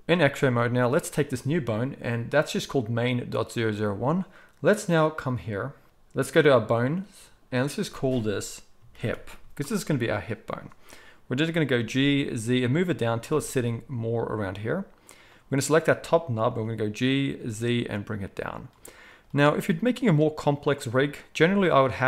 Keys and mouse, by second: 6.5 click, 6.6-7.6 middle drag, 7.6-11.4 drag, 11.4-15.3 middle drag, 11.7 g, 15.3-18.6 drag, 16.5 g, 18.6 middle click, 19.1 click, 19.6-22.0 middle drag, 21.4 r.